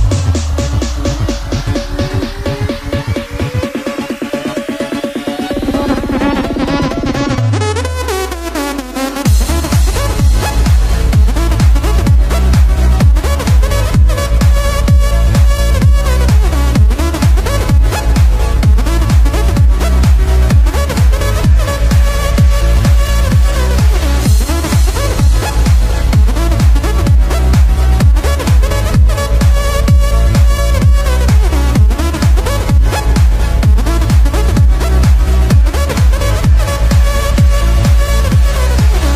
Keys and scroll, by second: 6.4 b, 7.4 ctrl+z, 12.6 space, 18.9 ctrl+-, 28.6 ctrl+=, 29.0 space, 31.7 ctrl+-, 35.3 ctrl+-, 37.1 ctrl+=, 37.9 ctrl+=.